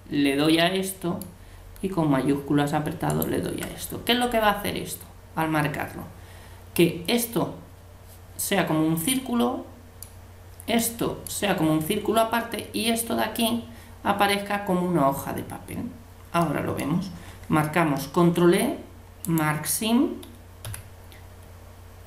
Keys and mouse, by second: 3.1-4.8 right drag, 9.1-12.6 middle drag, 16.4 middle click, 18.0 ctrl+e, 20.7 a.